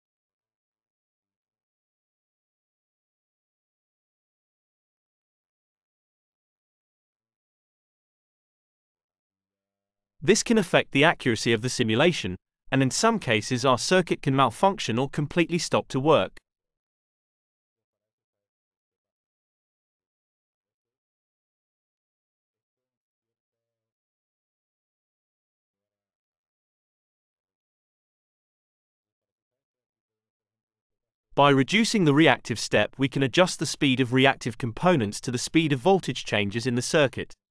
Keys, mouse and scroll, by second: 0.8 0, 0.9 0, 1.4 Return, 2.5 click, 5.3 click, 6.7 5, 7.2 Return, 8.7-11.8 drag, 21.8-24.1 drag, 25.2 click, 29.0 click, 30.2 click, 31.5 click, 32.6 click, 34.2 0, 34.4 0, 35.5 Return.